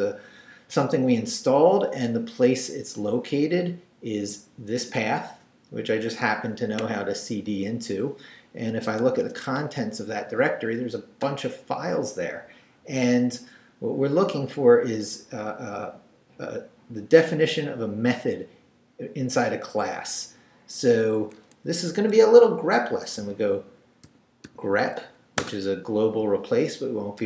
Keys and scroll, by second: 8.7 l, 9.2 Return, 23.2-25.4 typing.